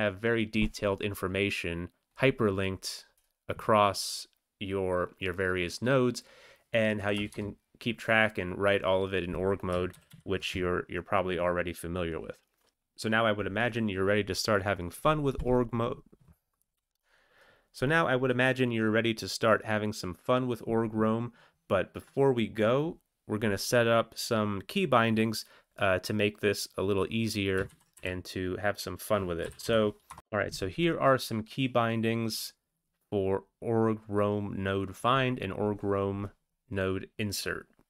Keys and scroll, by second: 7.2 Return, 7.5 Return, 9.9 ctrl+x, 10.1 ctrl+s, 27.7 ctrl+x, 29.4 typing, 30.1 Return.